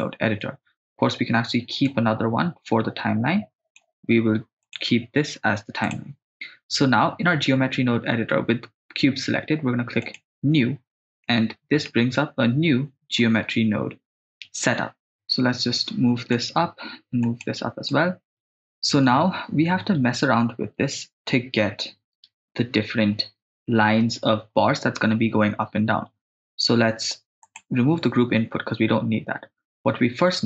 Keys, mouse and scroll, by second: 0.0 click, 1.9-3.8 drag, 5.9 click, 10.0-10.6 drag, 11.3 middle click, 12.2-13.3 ctrl+middle drag, 15.0 click, 16.2 click, 17.2 click, 17.9 click, 21.8 n, 27.5 click, 27.8 x.